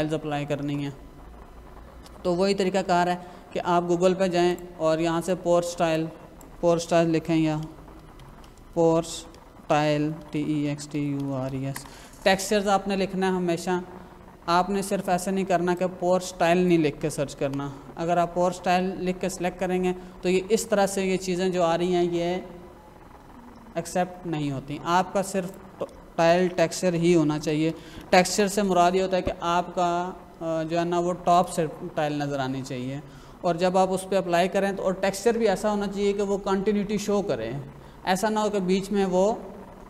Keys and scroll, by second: 7.4-11.5 typing, 11.7 Return, 17.0 BackSpace, 17.3 Return, 26.1-28.0 typing, 28.2 Return.